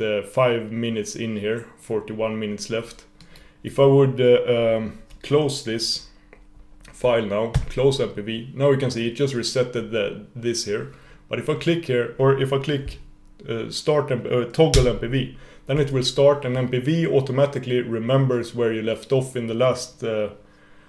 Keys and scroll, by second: 7.7 F4, 15.0 super+/.